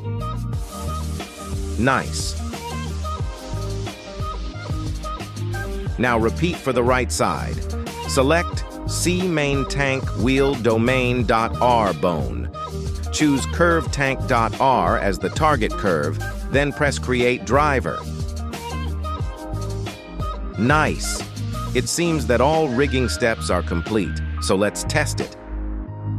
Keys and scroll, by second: 6.0 Escape, 18.7 y.